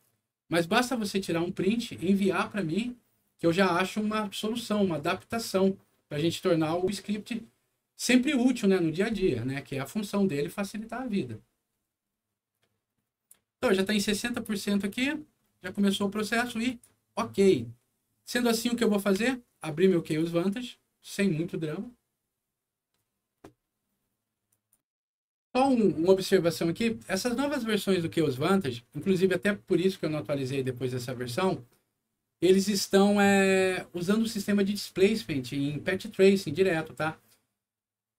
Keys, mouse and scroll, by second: 16.6 click, 20.1 click, 24.5 click.